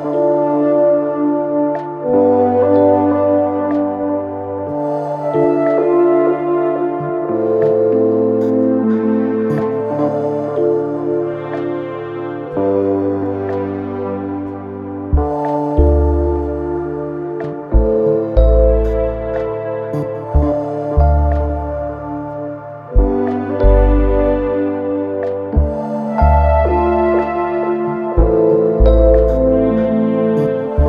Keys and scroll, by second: 11.9 3, 24.7 4, 27.0 5.